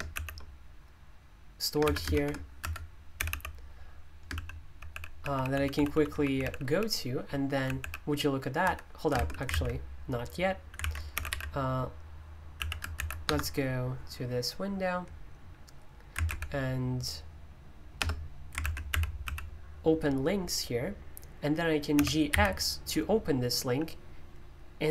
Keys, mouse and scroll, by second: 2.4-13.1 typing, 10.8 alt+o, 13.2 Return, 18.0 BackSpace, 21.9 g.